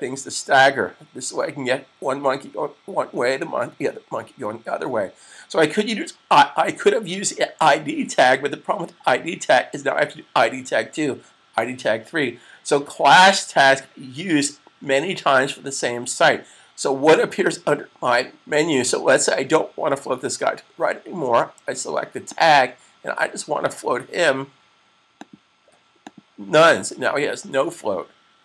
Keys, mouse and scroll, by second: 1.2 typing, 17.3 click, 22.2 click, 25.2 click.